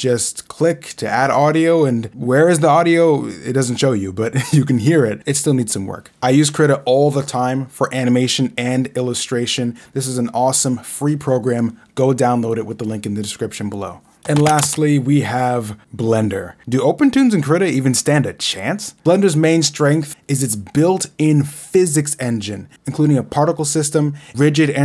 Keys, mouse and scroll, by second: 0.4 right click, 0.9 click, 1.9 right click, 2.6 click, 3.2 right click, 3.4 click, 5.1 right click, 5.6 click, 6.7 click, 7.4 Right, 7.8 scroll down 2, 9.5 scroll down 1, 10.0 Left, 10.5 scroll down 2, 12.1 Left, 12.5 scroll down 2, 13.0 Left, 13.4 right click.